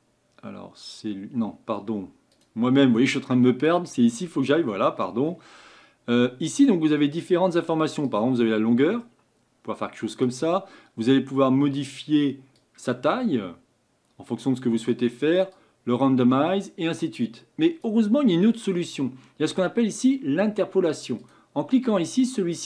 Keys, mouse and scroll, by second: 12.7-22.0 drag, 22.2-22.6 middle drag.